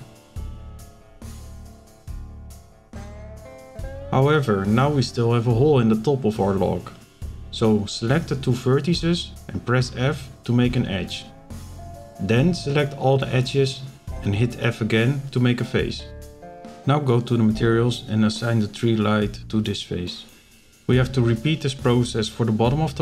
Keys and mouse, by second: 0.6 Delete, 2.5 z, 3.3 shift+middle click, 4.1 middle click, 6.6 shift+middle click, 8.8 f, 9.8 click, 10.3 alt+click, 11.0 f, 13.0 z, 14.8 click, 16.2 click, 20.8 f, 21.9 shift+middle click, 22.4 click.